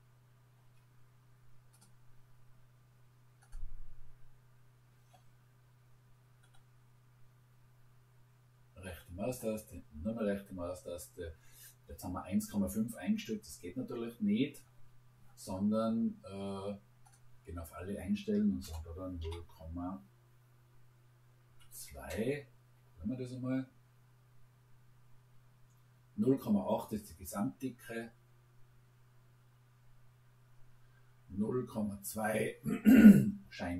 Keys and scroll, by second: 18.6 0, 19.5 ., 21.5 2, 21.9 Return.